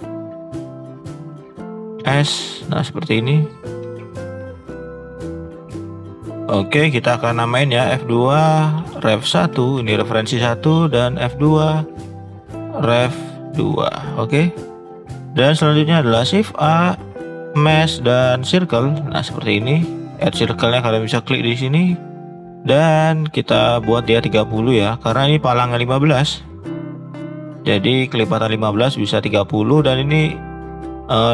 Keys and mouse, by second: 1.9 s, 3.8 g, 4.7 click, 6.0 shift+middle click, 6.1 shift+middle drag, 6.2 click, 7.8 F2, 10.8 click, 11.5 F2, 14.5 click, 15.2 shift+middle click, 16.1 shift+a, 22.4-27.0 drag.